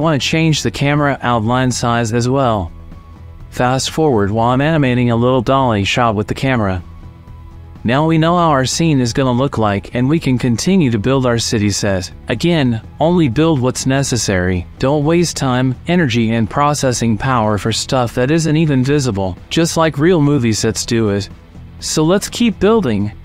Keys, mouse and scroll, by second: 2.5 click, 4.4 click, 4.6 middle click, 5.0 click, 5.4 click, 7.0 middle click, 7.2 click, 7.7 click, 9.3 ctrl+z, 9.7 click, 10.5 click, 11.2 middle click, 11.8 click, 12.8 middle click, 13.1 middle click, 13.7 shift+middle click, 15.0 click, 15.5 right click, 16.5 click, 17.9-18.6 shift+drag, 18.8 click, 19.5 click, 20.2-21.9 drag, 23.0 shift+click.